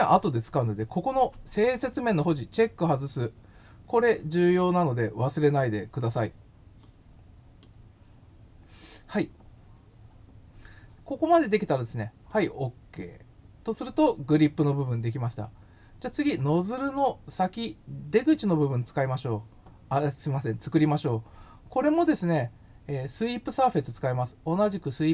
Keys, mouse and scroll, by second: 6.8 click, 12.3 click, 16.8 click.